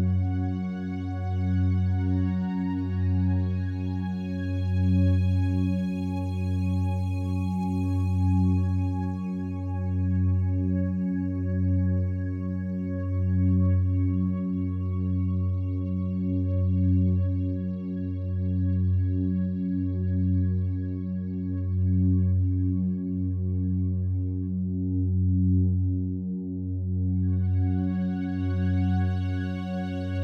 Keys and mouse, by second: 4.0 click, 6.0 click, 6.5 click, 7.3 click, 8.7 click, 9.8 click, 11.0 click, 12.4 g, 12.5 g, 14.2 click, 15.3 r, 15.6 y, 17.2 click, 17.7-20.1 alt+drag, 20.7 click, 21.0 alt+click, 21.9 alt+click, 23.1 shift+click, 23.6 alt+click, 24.1 click, 24.4-27.5 shift+drag, 24.4 typing, 27.8 typing, 29.3-30.2 drag.